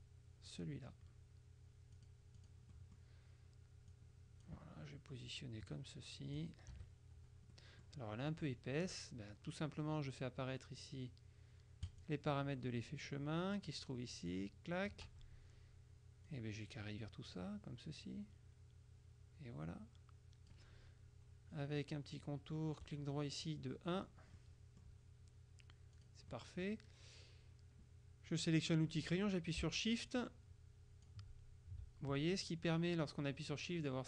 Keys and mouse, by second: 2.0-3.6 drag, 4.0 click, 5.4-7.0 drag, 6.8 KP_Subtract, 7.6 click, 12.0 click, 13.2 click, 14.4 click, 16.4-21.1 drag, 22.9 right click, 24.0 click, 26.0 click, 28.4 click, 30.2 shift+click.